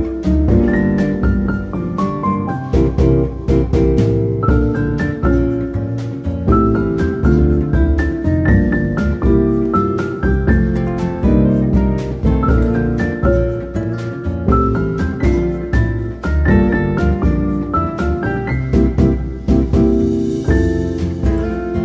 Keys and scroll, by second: 1.3 ctrl+z, 11.5 8, 11.8 F2, 18.8 Tab.